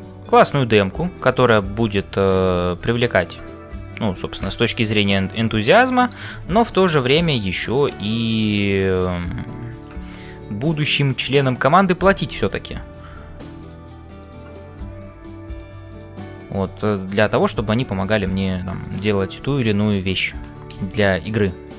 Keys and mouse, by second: 0.0-21.7 typing, 1.1 click, 5.6 click, 7.4 middle click, 10.1 shift+middle click, 14.2 click, 20.8 shift+middle click, 21.6-21.7 middle drag.